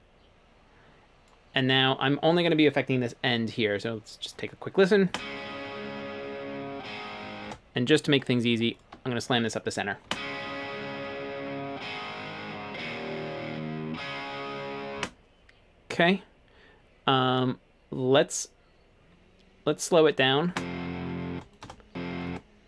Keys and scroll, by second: 5.1 space, 7.5 space, 10.1 space, 15.0 space, 20.5 space, 21.4 space, 22.3 space.